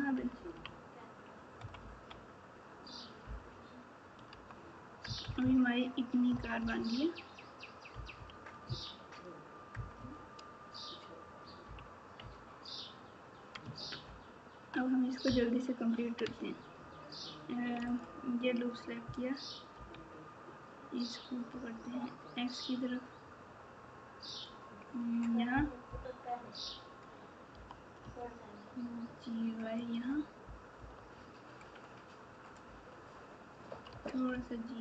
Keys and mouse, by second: 0.1 KP_6, 0.3 KP_6, 0.5 KP_6, 1.5 KP_Subtract, 1.8 KP_Subtract, 3.2 KP_Divide, 4.3 Tab, 5.0 KP_Add, 6.3 KP_4, 8.6 KP_6, 9.7 KP_Add, 14.0 ctrl+KP_4, 15.2 KP_Add, 16.2 Tab, 17.9 alt+click, 19.7 e, 25.8 KP_8, 27.5 g, 30.7 KP_7, 33.9 g.